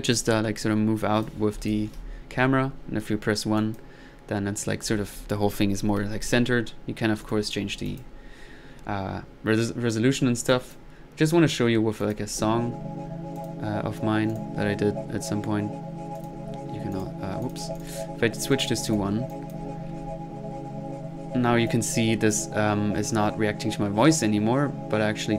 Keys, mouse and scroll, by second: 0.1 click, 1.0 click, 2.4 1, 2.6-3.2 middle drag, 3.6-4.0 drag, 6.7 middle click, 7.2-7.5 drag, 7.7 middle click, 7.9 drag, 10.5 click, 11.3 middle click, 12.0 click, 13.4 click, 14.3 drag, 16.2-16.5 drag, 16.9 drag, 17.8 click, 18.5 click, 19.3-19.7 drag, 19.9 1, 21.7 click.